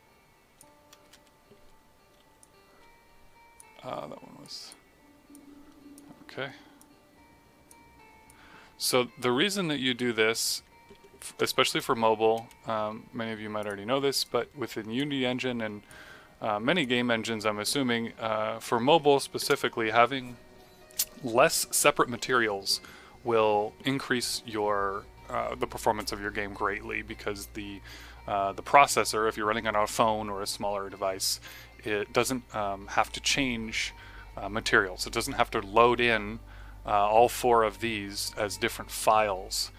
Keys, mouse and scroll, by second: 1.0 Return, 2.3 click, 11.3 Return, 13.6 click, 19.4 Return.